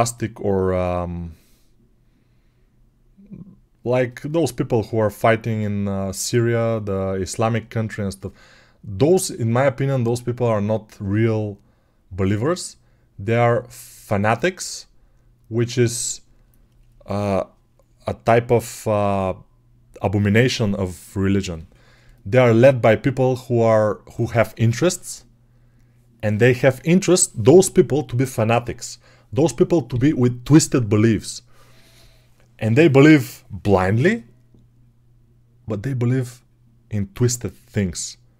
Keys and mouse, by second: 4.7-8.7 right drag, 8.7-38.3 drag.